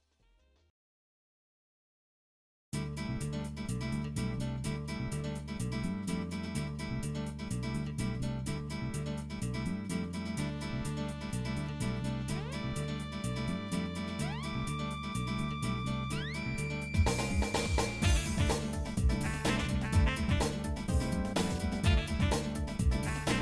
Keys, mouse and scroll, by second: 0.7 alt+shift+click, 1.8 shift+middle click, 3.3 alt+shift+click, 4.1 shift+middle click, 4.7 middle click, 5.8 alt+shift+click, 6.8 shift+middle click, 7.8 alt+shift+click, 8.6 shift+middle click, 9.3 middle click, 9.7 shift+middle click, 11.2 alt+shift+click, 11.8 shift+middle click, 12.8 alt+shift+click, 13.6 shift+middle click, 14.5 shift+middle click, 16.0 alt+shift+click, 16.7-18.5 shift+middle drag, 19.3 KP_Divide, 20.1 shift+middle click, 20.8-21.6 scroll up 4, 21.6 shift+middle click, 22.4 alt+shift+click.